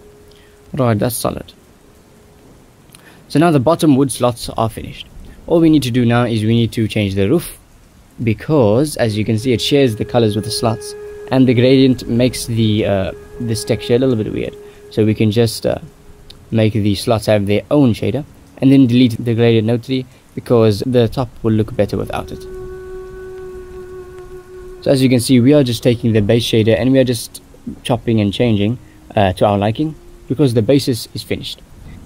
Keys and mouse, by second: 0.1 right click, 2.1-4.1 right drag, 4.3 middle click, 5.5-7.2 right drag, 7.6 shift+middle drag, 8.1 shift+middle click, 8.8 ctrl+s, 9.1 shift+middle drag, 9.9 shift+middle click, 12.9 shift+middle click, 15.7 shift+middle click, 18.5 middle click, 18.9 click, 19.5 x, 19.6 click, 19.6 middle click, 20.6 click, 21.0 click, 22.3-23.1 drag, 23.5 drag, 24.3 g, 25.1-25.5 drag, 25.9 g, 29.6-30.9 drag, 31.3 shift+middle click, 31.9 ctrl+s.